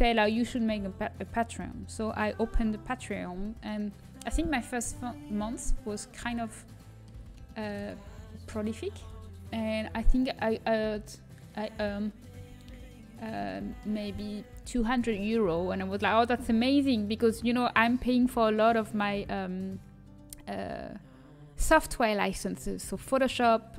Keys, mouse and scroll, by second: 6.6-12.0 middle drag, 12.7 a.